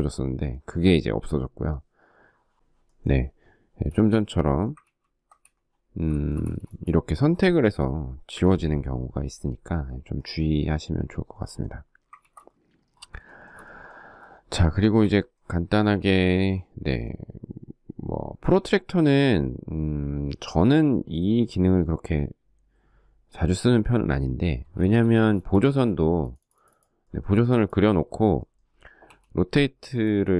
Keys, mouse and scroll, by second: 4.1 ctrl+z, 5.4 shift+middle click, 5.6 space, 7.5 Delete, 11.4 ctrl+z, 12.4 shift+middle click, 13.8 shift+middle click, 24.0 shift+middle click, 24.3 space, 28.2 q.